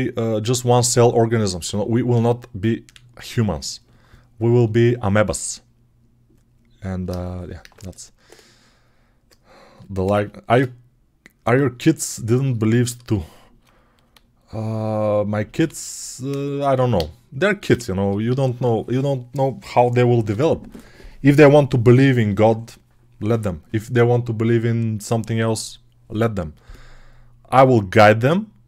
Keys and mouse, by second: 21.3-28.6 right drag.